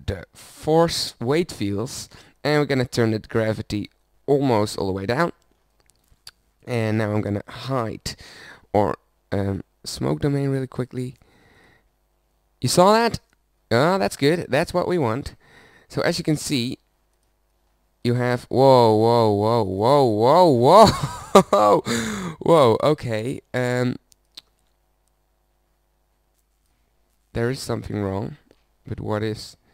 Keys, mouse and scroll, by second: 5.5 middle click, 6.6-7.6 drag, 7.6 h.